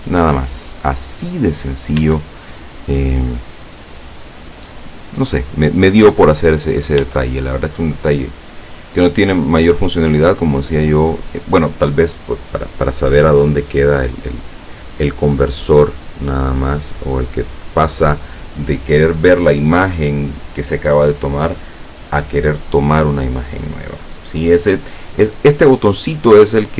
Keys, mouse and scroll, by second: 1.3-1.8 scroll up 1, 2.1 Tab, 6.7 scroll down 2, 7.1 Tab, 7.4-7.8 scroll down 2, 8.0-9.6 drag.